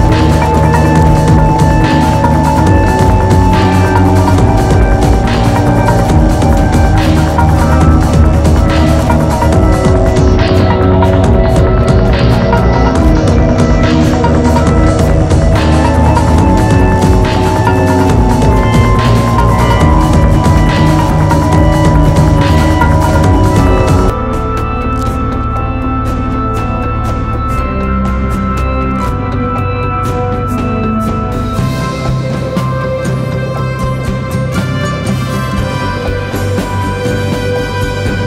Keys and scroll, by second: 7.3 3, 8.2 ctrl+z, 8.9 4, 11.7 ctrl+z, 12.9 3, 14.0 p, 16.1 ctrl+z, 17.3 3, 20.5 4, 22.0 3, 23.2 4, 24.4 3, 25.6 4, 26.6 3, 27.8 4, 29.7 3, 30.2 4, 31.2 p, 32.1 p, 33.5 p, 34.8 p, 36.0 p, 36.9 p, 38.1 p.